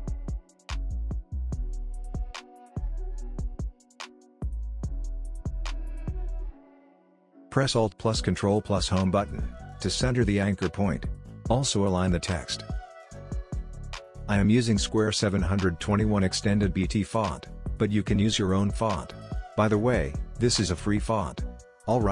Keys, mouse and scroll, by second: 0.0-2.3 typing, 3.8-8.5 drag, 8.5 ctrl+alt+Home, 11.9 click.